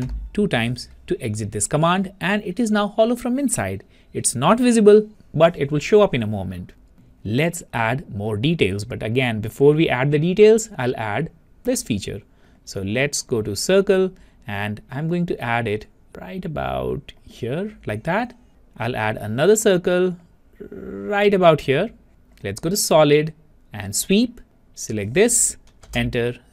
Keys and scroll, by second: 26.0 Return.